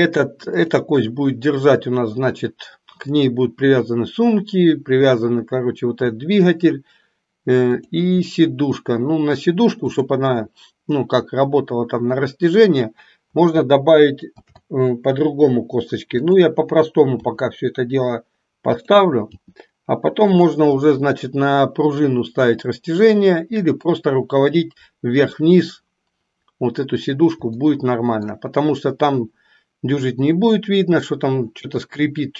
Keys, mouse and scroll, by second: 7.7 click, 14.4 shift+d, 17.2 s, 19.3 g, 27.6 shift+middle click.